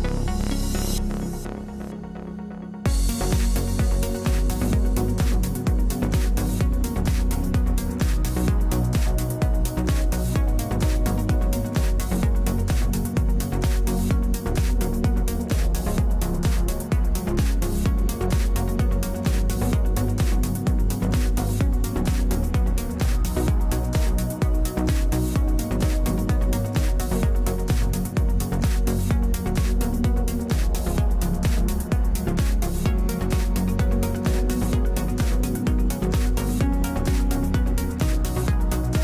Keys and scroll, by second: 0.4 space, 1.3 space, 4.4 space, 5.1 space, 7.4 ctrl+d, 23.5 w, 33.0 space, 33.6 space.